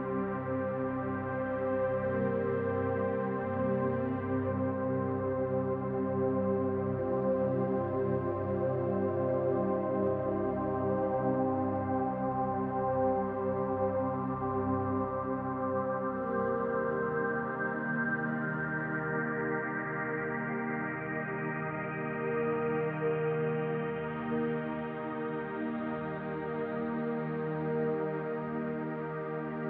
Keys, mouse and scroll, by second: 2.5 shift+middle click, 4.7 e, 6.3 middle click, 7.2 e, 7.7 s, 12.0 click, 13.2 s, 18.3 shift+s, 20.3 shift+a, 25.7 click.